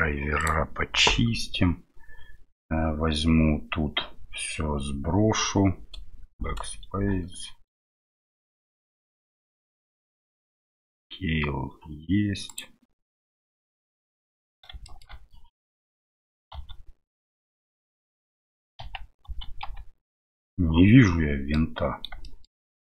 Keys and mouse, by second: 6.3 BackSpace, 8.3 middle click, 12.5 click, 13.8 Tab, 14.8 shift+middle click, 16.5 a, 17.9 a, 18.8 KP_Decimal, 19.2 a, 19.6 KP_Decimal, 21.0 middle click, 22.2 middle click, 22.6 middle click.